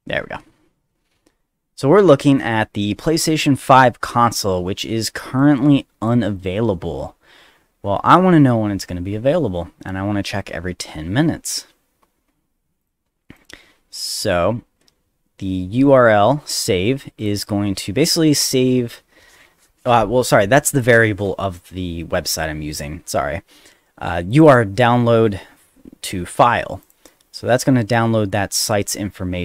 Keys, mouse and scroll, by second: 4.6 middle click, 4.6 scroll down 1, 5.4 click, 6.3 click, 7.8 middle click, 12.8 click, 13.4 click, 14.2 click, 16.0 click, 17.2 click, 17.4 click, 20.7 click, 24.3 click, 26.8 click.